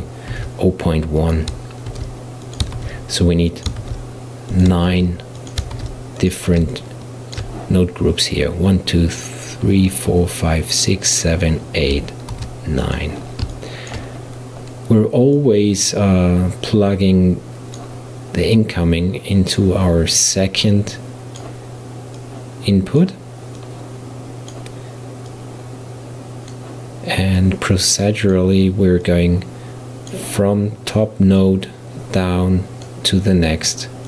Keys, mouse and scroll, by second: 0.3 shift+d, 1.9 shift+d, 2.8 shift+d, 3.8 shift+d, 4.9 shift+d, 5.8 shift+d, 6.8-9.8 shift+middle drag, 12.4 shift+d, 13.6-15.4 shift+middle drag, 15.4 click, 18.6 drag, 20.5 click, 22.2 drag, 23.6 drag, 25.3 click, 27.4 click, 29.1 click, 31.4 click.